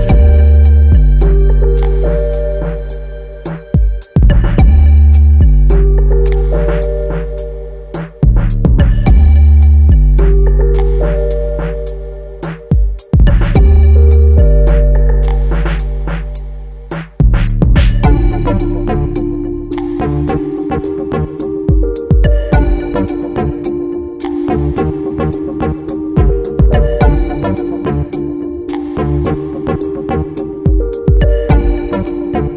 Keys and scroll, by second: 21.9 ctrl+t.